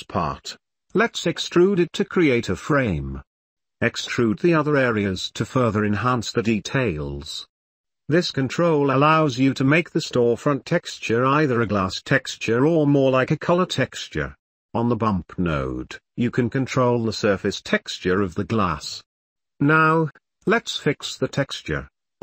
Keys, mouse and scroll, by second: 0.9 e, 2.3 Tab, 2.4 click, 2.6 shift+middle click, 4.0 e, 7.1 Tab, 7.3-7.8 middle drag, 14.0 click, 15.2 click, 20.8 middle click, 21.3 middle click, 21.6 shift+middle click.